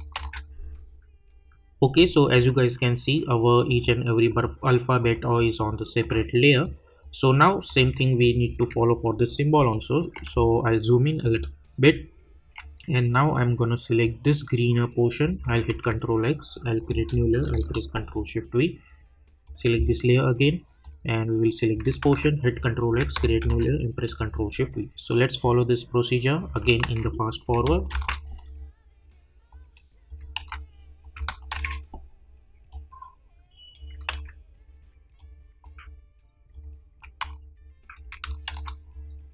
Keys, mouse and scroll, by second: 1.9-8.7 drag, 8.9-9.3 alt+scroll up 1, 10.4 click, 10.8 space, 12.2-13.7 alt+scroll up 2, 13.7 alt+scroll up 1, 14.0-16.8 drag, 19.4-22.9 drag, 24.1-26.5 drag, 27.4 click, 28.3 click, 32.7-35.1 drag, 37.9 click, 38.8 click.